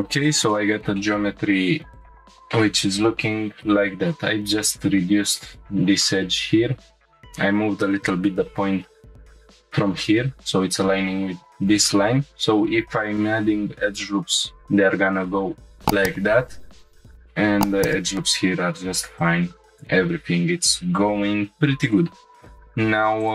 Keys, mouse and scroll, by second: 0.5 shift+middle click, 1.0 middle click, 1.9 click, 2.7 scroll down 1, 3.0 scroll up 2, 9.1 1, 11.9 ctrl+r, 17.7 ctrl+r, 23.2 click.